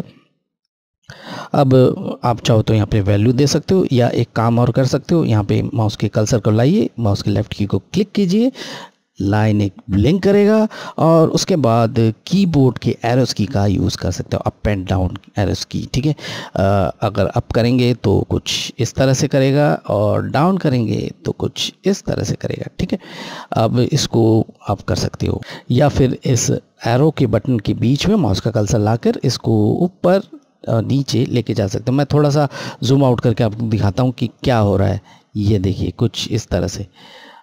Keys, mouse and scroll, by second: 7.5 click, 16.0 Up, 22.8 Up, 28.7 click, 30.9 scroll down 1, 34.0 click.